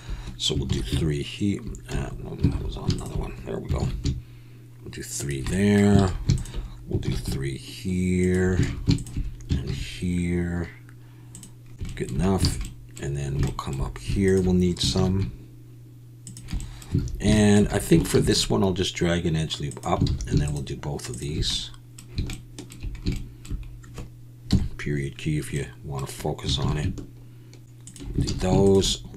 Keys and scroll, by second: 0.7 ctrl+b, 1.9 Escape, 2.5 alt+a, 3.8 ctrl+b, 6.0 alt+a, 7.0 ctrl+b, 8.6 alt+a, 9.6 ctrl+b, 12.5 alt+a, 14.9 ctrl+b, 17.0 alt+a, 18.1 ctrl+r, 20.0 alt+a, 24.5 KP_Decimal, 26.6 ctrl+b, 28.2 alt+a.